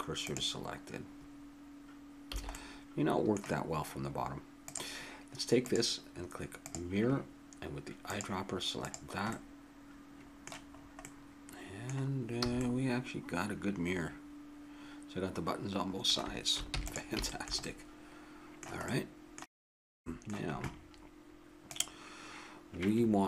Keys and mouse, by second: 2.3 a, 4.6-7.5 drag, 8.0-9.9 drag, 9.9-12.4 middle drag, 12.4 a, 16.7 ctrl+s, 17.2 middle click.